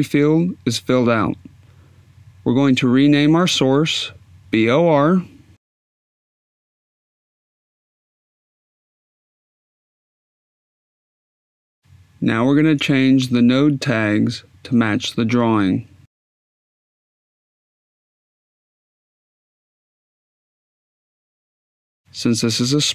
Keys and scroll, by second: 5.3 shift+b, 6.5 shift+o, 7.4 shift+r, 8.4 Caps_Lock, 16.0-17.0 typing, 22.8 s.